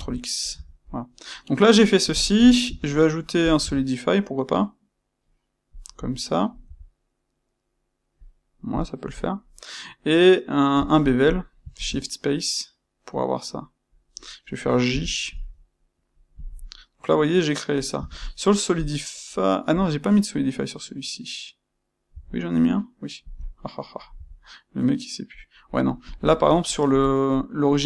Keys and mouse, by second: 0.5 Tab, 0.8-16.3 middle drag, 2.6 space, 16.3 click, 16.5-26.0 middle drag, 17.9 space, 26.0 click, 26.2-27.8 middle drag.